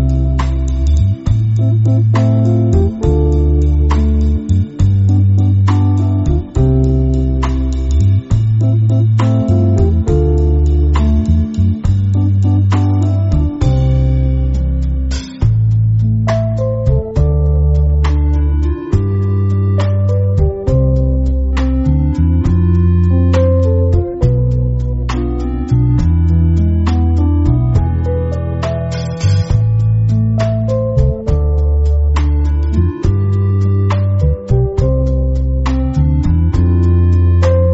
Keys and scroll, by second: 0.0-2.4 alt+super+space, 1.1 space, 1.6-2.4 space, 2.6 space, 2.6 space, 3.2 alt+super+space, 4.4 space, 4.9 space, 5.8 space, 6.3 alt+super+space, 6.4 alt+super+space, 6.6-7.1 alt+super+space, 8.8 space, 10.9-11.8 typing, 15.0 shift+super+F2, 16.1 space, 29.8 super+g, 30.2-31.6 typing, 30.7 super+space, 31.1 super+space, 34.8 space, 35.3 alt+super+space, 35.4-35.9 alt+super+space, 36.6 space, 37.1 alt+super+space, 37.2 alt+super+space.